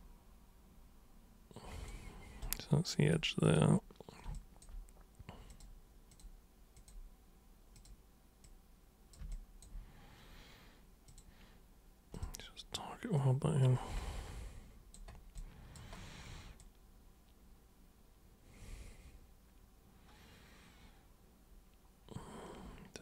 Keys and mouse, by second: 2.4 super+right click, 3.4 super+click, 4.3 alt+super+click, 5.4 super+click, 6.1 super+click, 6.7 super+click, 7.7 super+click, 8.4-9.1 super+drag, 9.3 alt+super+click, 11.0 super+click, 12.1 super+click, 13.1 super+click, 14.0 alt+super+click, 20.3-22.8 alt+super+drag, 22.8 alt+super+click.